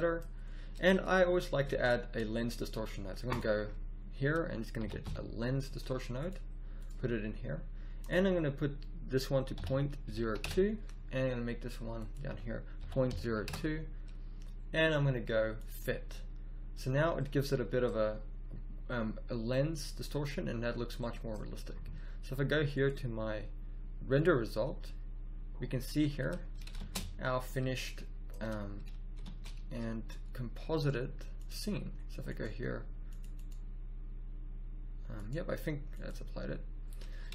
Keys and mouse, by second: 24.0 click, 29.1 shift+space, 32.2-32.9 drag, 36.0 click, 36.7 middle click.